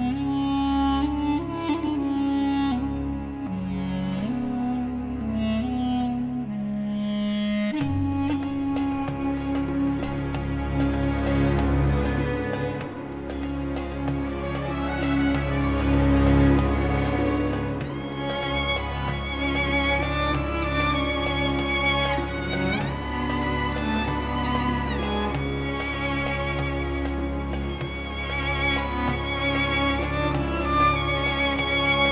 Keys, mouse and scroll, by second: 0.0 click, 0.5-0.9 scroll up 2, 1.0-1.7 scroll down 4, 3.2 click, 5.2 2, 6.0 click, 7.1 scroll up 1, 7.6-8.0 scroll down 1, 8.5 scroll up 2, 10.9 click, 11.9 click, 13.3 3, 14.0 click, 18.2 click, 19.4 click, 20.7 6, 21.6 click, 23.2 click, 24.5 5, 25.5 click, 26.6-26.9 scroll up 1, 27.2-27.5 scroll down 1, 28.8 click, 30.1 click, 31.5 click.